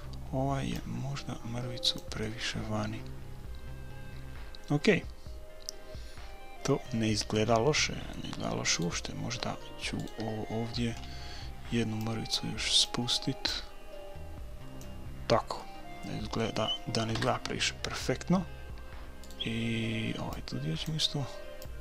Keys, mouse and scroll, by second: 0.8-2.7 drag, 2.2 right click, 2.7-4.2 middle drag, 8.7-11.5 right drag, 11.0 middle click, 11.5-13.2 drag, 13.9-15.1 drag, 15.6-17.5 middle drag, 17.2 KP_1, 19.2-21.1 right drag, 20.3-21.8 drag.